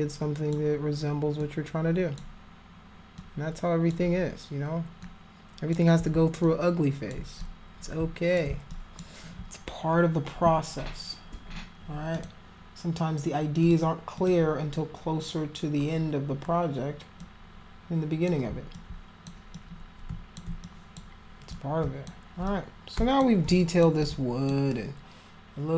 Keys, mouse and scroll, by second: 1.4 alt+click, 3.2 alt+click, 5.0 alt+click, 6.4 alt+click, 7.4 click, 8.7 alt+click, 12.1 click, 13.6 click, 14.1 click, 17.1-18.2 drag, 18.7 alt+click, 19.5 click, 20.6 alt+click, 21.5 shift+click, 22.4 click, 23.6 alt+click, 24.0 alt+click.